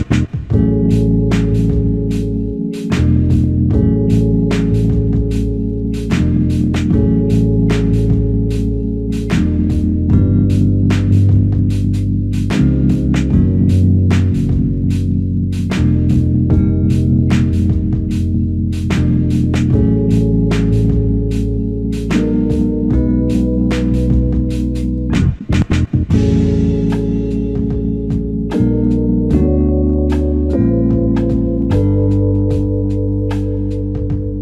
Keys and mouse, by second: 2.1 double click, 4.3 alt+click, 5.5 double click, 7.6 alt+click, 9.8 double click, 11.0 typing, 12.5 double click, 14.0 alt+click, 17.5 alt+click, 19.3 double click, 24.5 alt+click, 31.7 shift+click, 31.9 shift+double click.